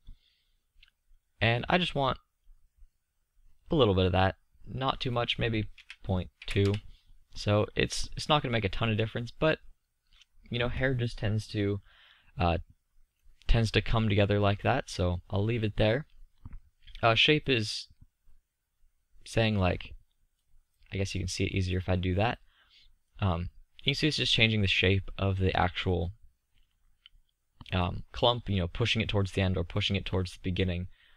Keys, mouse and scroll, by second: 5.3-7.2 middle drag, 8.1-9.9 middle drag, 10.0-13.5 middle drag, 19.6-21.0 middle drag, 24.5-30.0 middle drag.